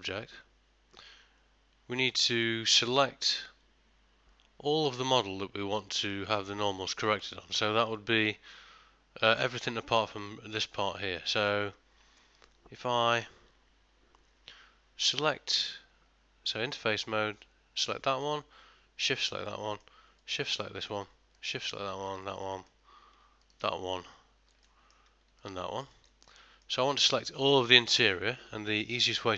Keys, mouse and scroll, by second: 0.3 Tab, 1.1 middle click, 5.9 middle click, 7.1 ctrl+middle click, 7.9 middle click, 14.4 3, 15.4 middle click, 17.5 click, 18.0 middle click, 19.1 shift+click, 19.6 middle click, 20.3 shift+click, 20.7 middle click, 21.5 shift+click, 22.3 shift+click, 22.5 middle click, 23.5 shift+click, 24.7 middle click, 25.5 shift+click, 26.0 ctrl+middle click, 26.3 middle click, 27.0 ctrl+middle click, 27.3 shift+middle click.